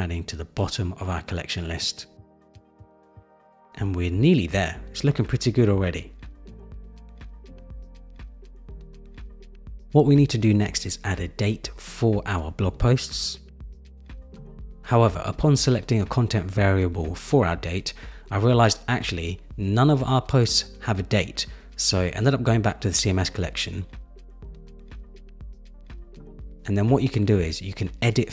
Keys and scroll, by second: 0.2 shift+Up, 1.7 shift+Up, 7.7 super+-.